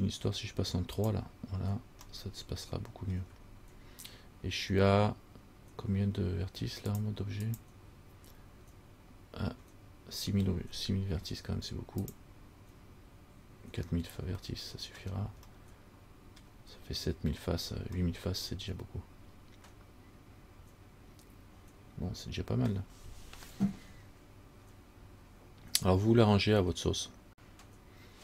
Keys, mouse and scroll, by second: 1.2 click, 2.2 scroll up 1, 2.3 middle click, 3.4-5.4 scroll down 3, 7.1 click, 12.2 click, 14.7 shift+middle click, 15.2 shift+scroll down 1, 15.8 middle click, 17.7 scroll down 2, 18.2 middle click.